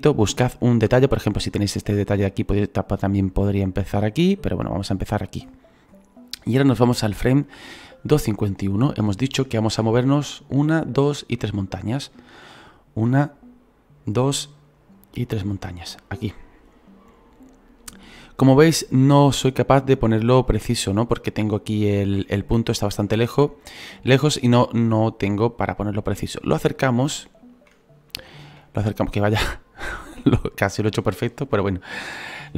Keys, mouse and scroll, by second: 7.6-9.1 drag, 8.4-9.8 scroll down 14, 9.8-12.5 shift+middle drag, 12.5-15.6 drag, 18.3-26.4 shift+middle drag, 26.4-26.9 scroll up 8, 27.1 shift+middle click, 27.8-28.2 scroll up 2, 28.2-29.4 shift+middle drag, 29.4-31.2 scroll up 2, 31.2-32.5 scroll up 1.